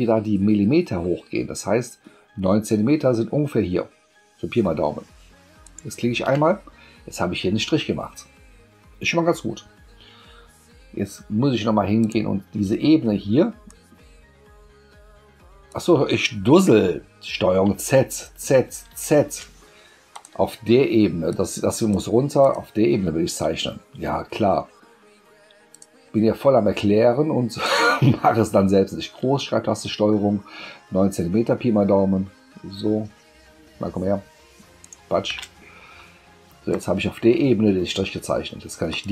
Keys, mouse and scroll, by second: 5.6 ctrl+shift+click, 12.0 click, 13.7 click, 17.7 ctrl+z, 18.1 ctrl+z, 18.9 ctrl+z, 20.1 click, 21.3-21.9 drag, 22.4 click, 25.7 click, 27.6 click, 34.8 ctrl+shift+click, 36.7 click, 38.9 click.